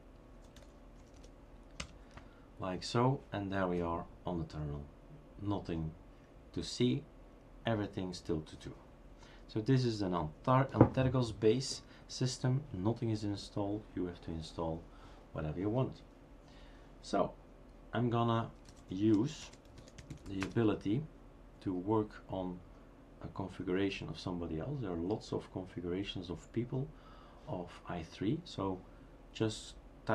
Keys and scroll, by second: 0.9-1.6 typing, 18.3-20.7 typing.